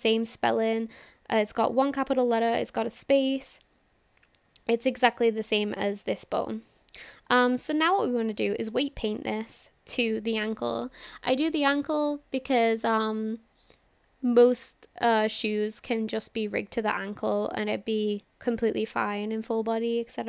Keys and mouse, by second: 7.8-8.4 shift+middle drag, 8.8-9.1 shift+middle drag, 9.4-9.9 shift+middle drag.